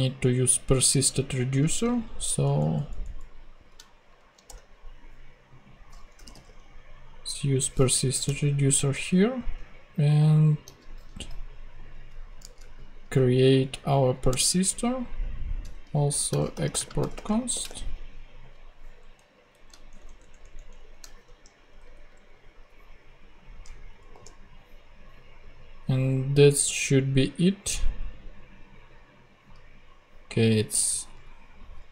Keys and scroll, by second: 2.4 alt+shift+Up, 4.0 alt+shift+super+Up, 4.1 alt+shift+super+Right, 4.4 super+Return, 5.4 Return, 5.9-6.7 typing, 7.9 Down, 8.2 Return, 10.8 super+x, 12.4 super+Return, 12.6 super+v, 14.2 Return, 15.8-17.8 typing, 18.9 Up, 19.6 shift+Up, 19.8 shift+Down, 21.1 shift+], 21.6 BackSpace, 24.1 ;.